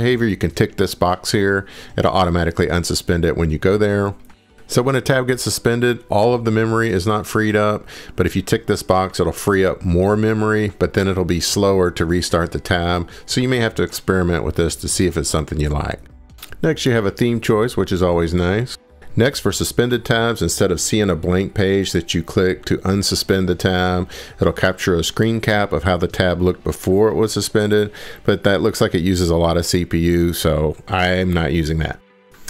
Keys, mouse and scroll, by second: 16.4 scroll, 17.3 click, 18.8 click, 21.1 click, 25.4 click, 30.9 click, 31.1 scroll, 32.1 scroll.